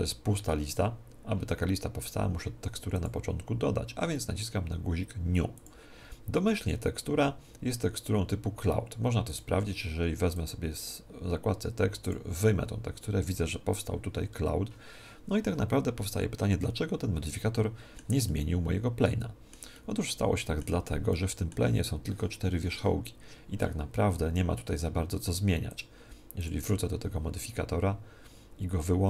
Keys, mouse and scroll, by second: 5.5-7.5 drag, 9.2-12.3 drag, 16.0-17.7 middle drag, 18.2-25.6 middle drag, 25.6-28.2 drag.